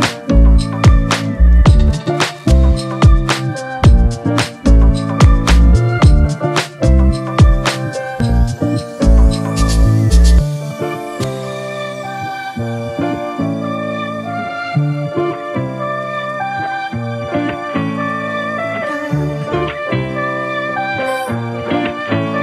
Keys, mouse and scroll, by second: 0.7 click, 1.0 scroll up 2, 1.7-3.1 drag, 4.0 click, 4.9 click, 6.3-7.6 drag, 7.8-8.8 drag, 10.0 click, 10.6 click, 10.7 scroll down 2, 11.5 click, 12.0 click, 12.6 s, 13.6 scroll up 2, 13.8 click, 14.3 click, 14.5 right click, 15.2 click, 15.7 click, 16.5 click, 16.7-17.4 scroll down 3, 17.4 click, 19.6 click, 20.6 click, 21.2-22.0 drag.